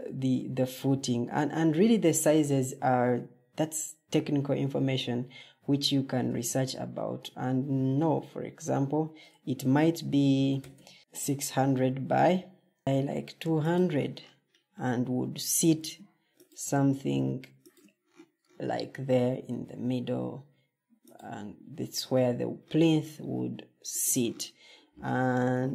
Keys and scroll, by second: 6.1 Tab, 10.1-11.1 typing, 12.6-13.3 typing, 15.6 ctrl+d, 19.1 ctrl+d, 25.0 ctrl+d.